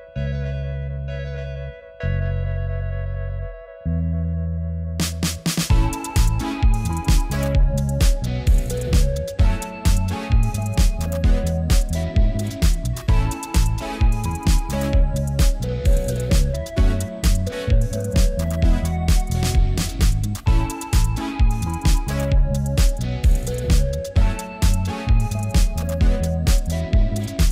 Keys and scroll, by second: 2.2 b.